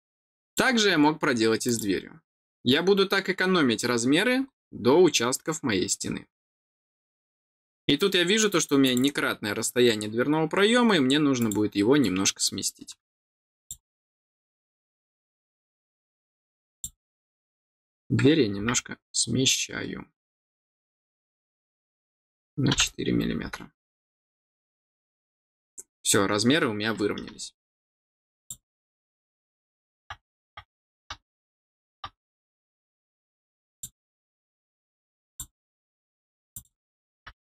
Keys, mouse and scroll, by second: 0.4 click, 1.6 click, 4.4-5.0 scroll down 2, 5.1 scroll up 1, 6.6 scroll down 1, 8.8 click, 11.3 click, 13.5 click, 16.6 click, 20.2 click, 25.5 middle click, 28.3 click, 33.6 click, 35.2 click, 36.4 click.